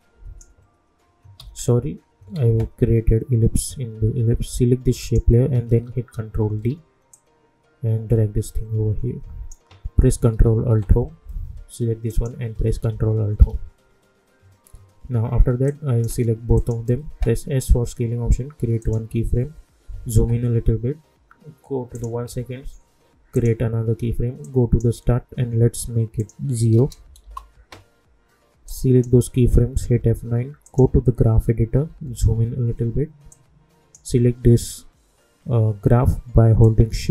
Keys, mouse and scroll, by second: 1.3 ctrl+z, 2.6 ctrl+z, 5.0 click, 6.4 ctrl+d, 7.1-10.7 drag, 10.7 ctrl+alt+Home, 12.1 click, 13.2 ctrl+alt+Home, 15.6 click, 17.5 s, 18.8 click, 19.9 =, 20.1 =, 21.9-26.2 drag, 27.2 Return, 28.6 click, 29.7 F9, 30.6 click, 32.0 =, 32.2 =, 33.3-36.4 drag, 36.6 click, 36.6-37.1 drag.